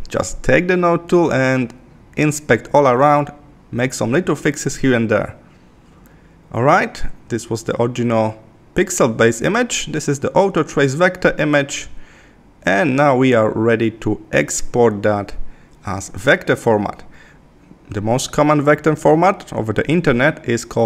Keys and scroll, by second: 0.5 super+=, 1.5 super+=, 14.6 super+=.